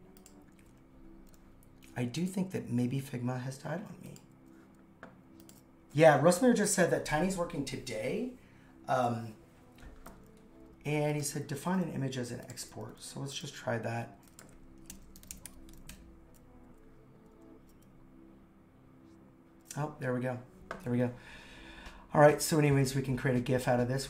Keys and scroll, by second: 14.9 super+/, 14.9-15.9 typing.